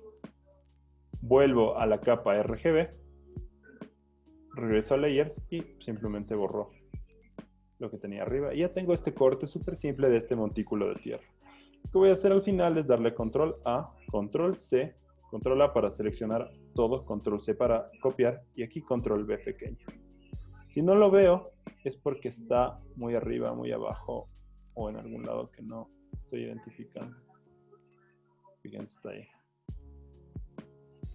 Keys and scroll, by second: 6.1 BackSpace, 7.7 super+d, 12.3 v, 12.9 super+a, 14.1 super+c, 18.4 super+v, 20.1 v, 30.0 z.